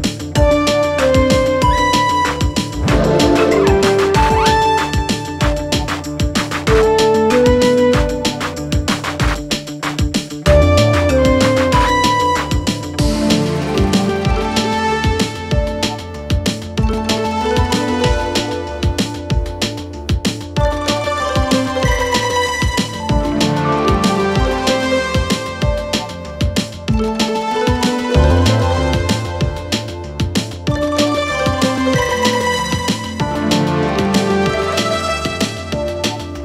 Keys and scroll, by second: 1.7 Delete, 2.3 Delete, 3.0 4, 5.4 3, 9.6 Delete, 29.6 ctrl+z.